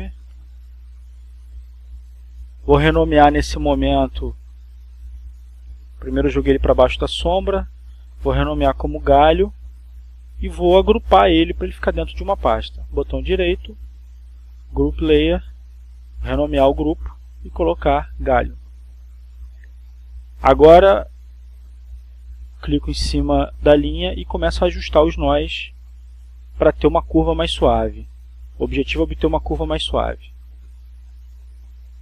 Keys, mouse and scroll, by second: 0.0 click, 2.0 click, 4.2 click, 7.7 click, 8.9 click, 10.4-12.3 typing, 12.6 Return, 15.0 right click, 17.1 click, 18.4-19.5 drag, 20.4-21.9 typing, 25.0 click, 25.7 click, 26.9-28.8 drag, 29.2-30.3 drag, 30.4-32.0 drag.